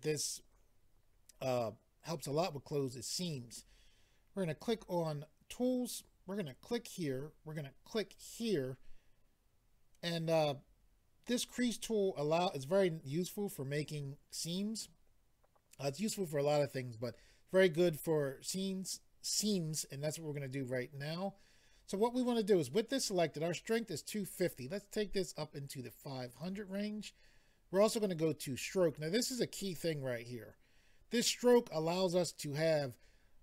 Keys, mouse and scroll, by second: 4.6 click, 6.4 click, 8.1 click, 24.5 click, 28.5 click, 28.6 click.